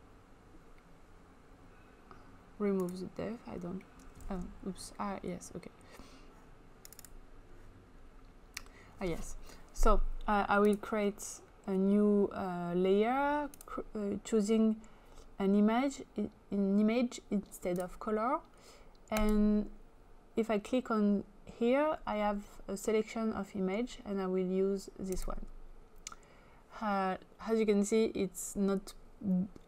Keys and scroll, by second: 4.2 ctrl+z.